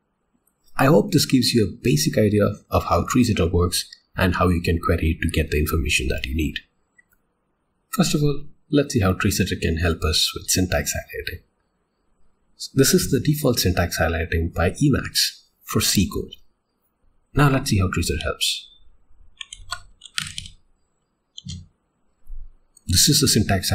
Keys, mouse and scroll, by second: 7.0 click, 19.6 alt+x, 21.4 Return.